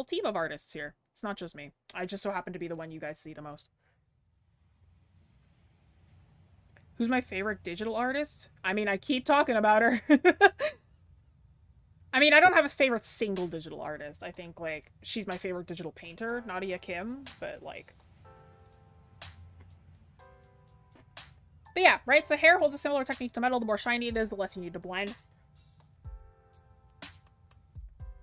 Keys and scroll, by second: 8.6 ctrl+z.